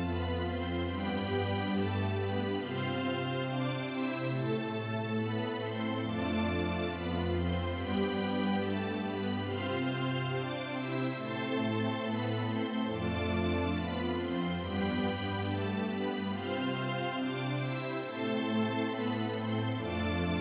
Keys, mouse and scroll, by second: 2.4 click, 10.2 click, 19.8 click.